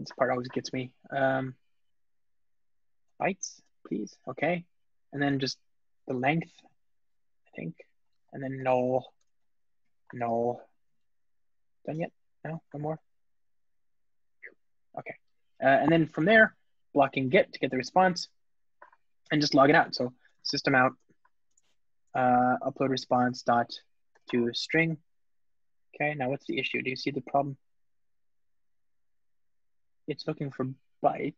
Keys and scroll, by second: 11.7 super+p, 17.6 Return.